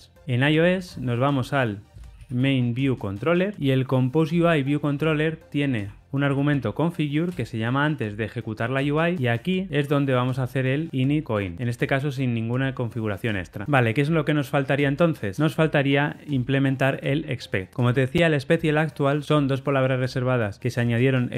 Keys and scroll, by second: 7.3 Return, 11.3 Return.